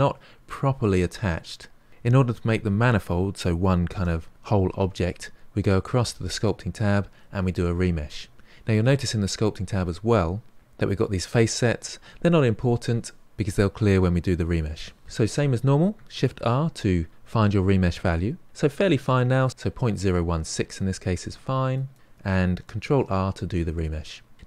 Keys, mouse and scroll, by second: 6.4 click, 16.1 shift+r, 23.1 ctrl+r, 24.3-24.4 scroll up 3.